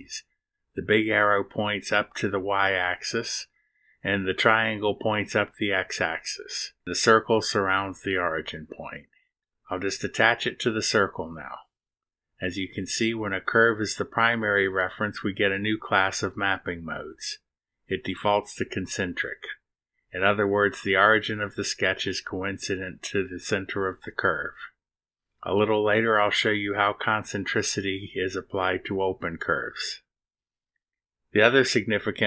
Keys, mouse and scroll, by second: 1.3 click, 10.1 click.